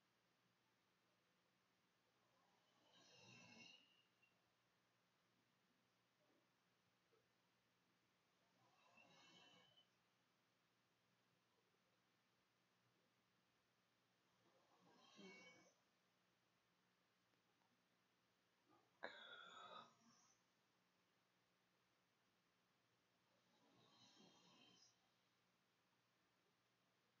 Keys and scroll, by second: 0.0-0.3 typing, 1.9 v, 2.4 g, 6.5 -, 6.6 =, 6.7 Delete, 6.7 \, 8.8 i, 12.0-15.7 typing, 26.5-27.2 typing.